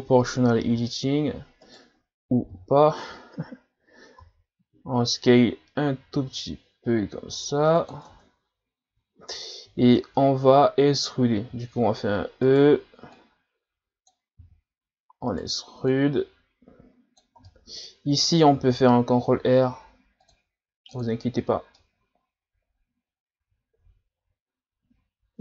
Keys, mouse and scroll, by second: 3.3-4.2 scroll up 1, 4.2 s, 8.1 Tab, 8.9 Tab, 9.1 scroll down 1, 9.3-10.3 middle drag, 10.3-10.7 scroll down 1, 10.7 scroll up 1, 11.5 e, 13.1 click, 14.5 e, 15.9 click, 17.5-18.6 middle drag, 18.6 ctrl+r, 21.7-24.8 middle drag.